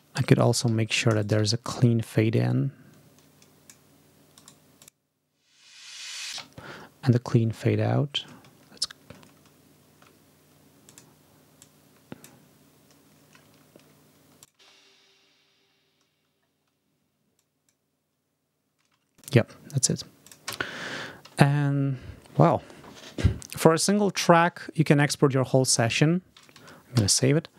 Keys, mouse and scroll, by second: 0.1 ctrl+click, 0.5 ctrl+s, 0.8 ctrl+shift+click, 1.0 ctrl+shift+right click, 1.4 scroll up 2, 2.3-3.7 drag, 4.2 right click, 4.7 click, 5.6-6.0 ctrl+scroll down 2, 6.2 space, 6.6 scroll up 1, 7.4-8.0 scroll down 3, 9.2-10.0 ctrl+scroll up 4, 10.7 click, 11.5 click, 13.4 ctrl+scroll down 2, 14.3 click, 14.4 space, 15.6 ctrl+scroll up 2, 17.2 click, 17.3 scroll up 2, 17.5 click, 18.8 space, 19.1 click, 19.1-19.4 scroll up 2, 20.4 space, 20.8 ctrl+scroll down 2, 26.8 ctrl+s.